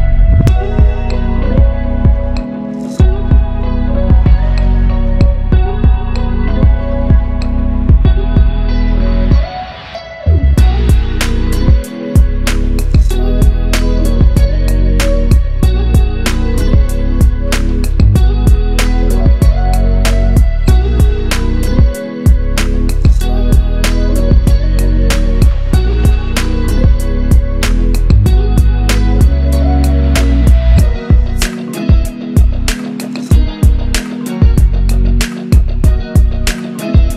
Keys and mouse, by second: 0.9 shift+click, 1.6-3.6 middle drag, 3.6 shift+click, 4.6 shift+click, 5.7 shift+click, 6.4-11.8 middle drag, 11.8-12.5 ctrl+KP_2, 13.4-16.4 middle drag, 16.4 shift+click, 17.8 KP_7, 19.1 g, 25.4-30.5 middle drag, 30.5 Tab, 33.9 click.